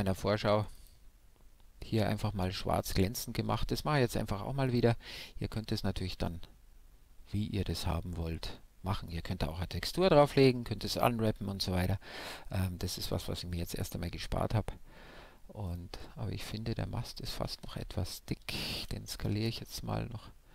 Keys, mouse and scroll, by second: 1.4-3.1 drag, 6.6-13.2 middle drag, 12.4-15.0 right drag, 13.5 Tab, 14.2 a, 14.4 a, 15.6 s, 16.1 shift+z.